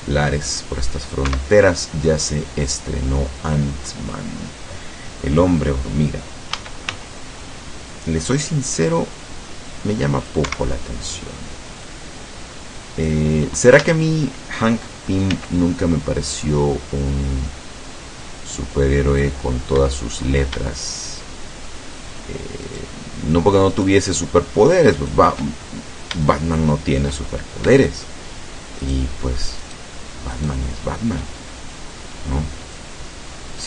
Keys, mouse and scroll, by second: 1.3 Escape, 2.7-4.3 drag, 6.6 a, 7.0 c, 8.0-10.5 drag, 10.5 Escape, 12.0-13.3 drag, 13.9 a, 15.4 c, 16.3-19.5 drag, 19.8 Escape, 22.7 shift+right click, 23.7 shift+right click, 25.0 shift+right click, 25.7-26.2 shift+scroll up 1, 26.4 shift+middle click, 27.4-27.7 shift+scroll up 1, 28.9 shift+right click, 29.7 shift+right click, 30.4 shift+right click, 32.8-33.6 drag.